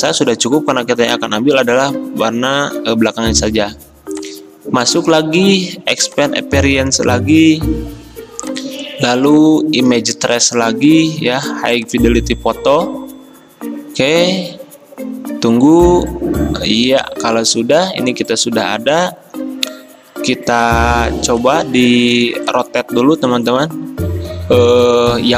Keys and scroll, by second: 22.3 r.